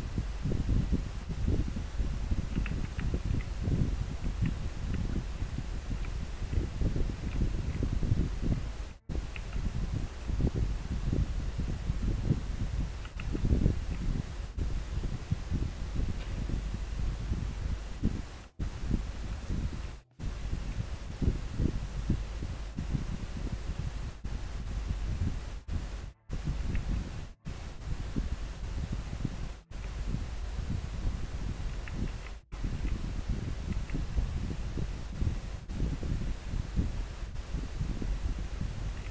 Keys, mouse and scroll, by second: 3.4 scroll down 1, 5.8 scroll down 1, 6.6 scroll up 1, 7.8 scroll up 1, 11.0 scroll up 1, 32.2 scroll down 1, 33.0 scroll up 1.